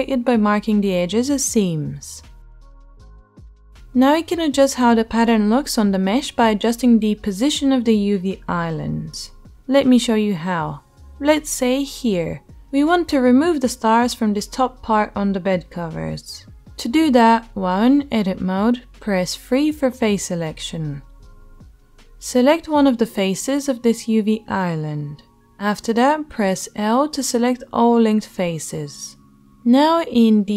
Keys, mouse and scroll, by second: 2.0 click, 2.2-23.1 right drag, 18.4 3, 22.0 click, 22.0 middle click, 23.1-30.5 drag, 26.5 l.